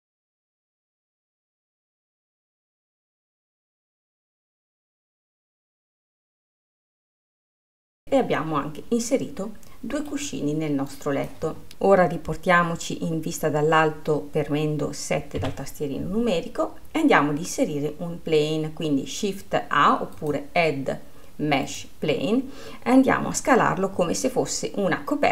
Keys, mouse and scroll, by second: 0.3 click, 1.4 click, 1.9-3.0 drag, 3.9 click, 4.5 middle click, 5.5 shift+d, 6.2 click, 7.0 scroll, 7.2 middle click, 7.7 click, 8.0-10.9 middle drag, 11.1 click, 11.7-15.6 middle drag, 15.6 KP_7, 17.0-20.0 scroll down 1, 20.5-22.9 drag, 22.9-24.2 scroll, 24.2-25.3 s.